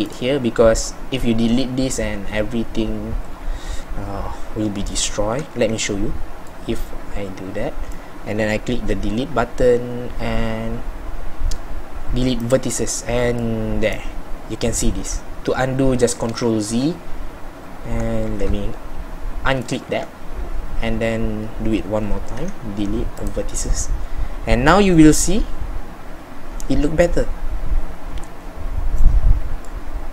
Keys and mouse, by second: 13.5-16.4 middle drag, 16.4 ctrl+z, 18.4 z, 20.5 z.